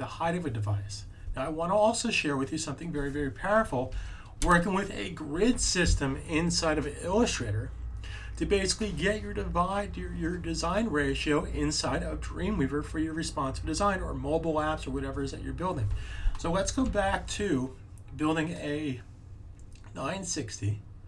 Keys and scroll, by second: 3.8 super+a, 16.8 m.